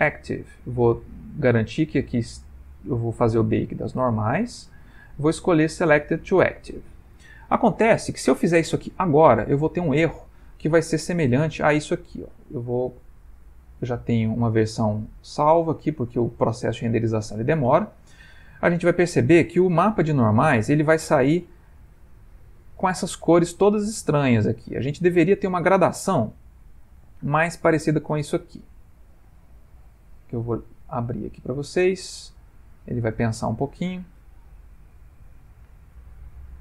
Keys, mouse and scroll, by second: 0.6 click, 9.5 middle click.